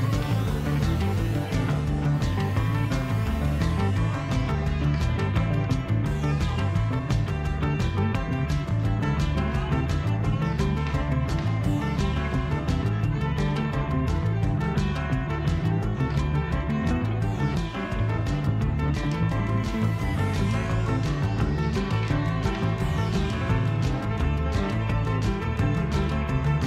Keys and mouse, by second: 0.5 shift+click, 1.6-4.7 ctrl+drag, 6.8 BackSpace, 6.9 BackSpace, 13.4-21.4 drag, 24.9-26.6 drag.